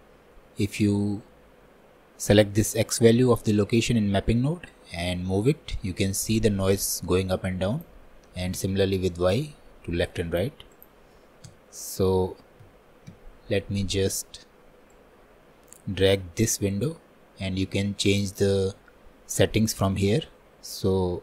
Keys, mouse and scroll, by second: 5.1-21.2 drag.